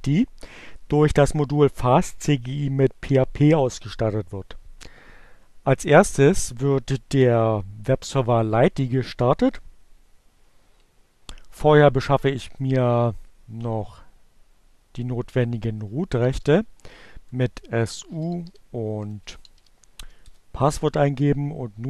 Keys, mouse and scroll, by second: 14.6-15.5 typing, 17.3 Return, 17.5-18.5 typing, 19.8 l, 20.0 Return.